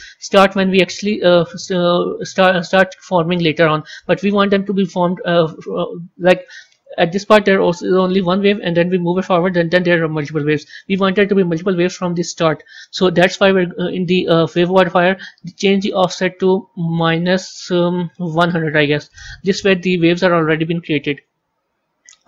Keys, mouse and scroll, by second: 1.3-6.5 drag, 8.5-11.5 drag, 15.9-18.3 drag, 18.3 KP_0, 21.3-22.2 scroll down 7.